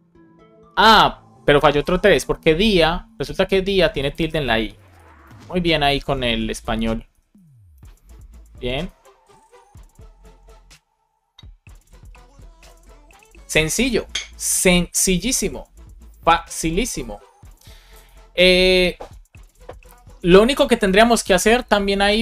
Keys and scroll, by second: 4.7 BackSpace, 7.0 BackSpace, 8.2 super+s.